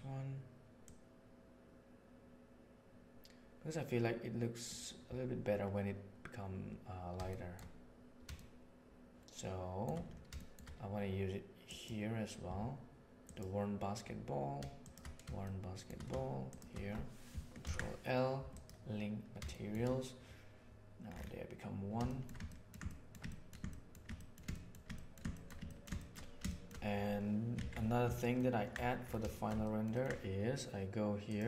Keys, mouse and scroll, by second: 0.8-3.1 drag, 3.1 right click, 7.4 shift+middle click, 8.4-9.8 shift+middle drag, 10.4 shift+middle click, 11.6 click, 13.2 click, 14.7 shift+click, 15.5 shift+middle click, 16.4 shift+click, 17.5 ctrl+l, 19.6 shift+drag, 22.0 shift+middle drag, 22.5 ctrl+middle click, 22.9 shift+middle click, 23.3 ctrl+middle click, 23.6 shift+middle drag, 24.1 ctrl+middle click, 24.5 shift+middle click, 24.9 ctrl+middle click, 25.3 shift+middle click, 25.7 ctrl+middle click, 26.0 shift+middle click, 26.5 shift+middle click, 27.5 alt+a, 28.2 ctrl+middle click, 29.3 shift+middle click, 29.5 ctrl+middle click, 29.9 ctrl+middle click.